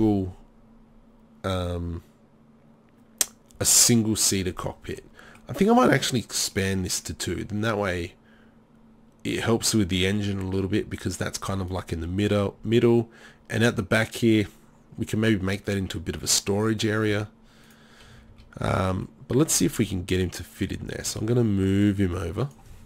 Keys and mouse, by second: 17.1 z, 18.1 a, 18.3 a, 21.1 z.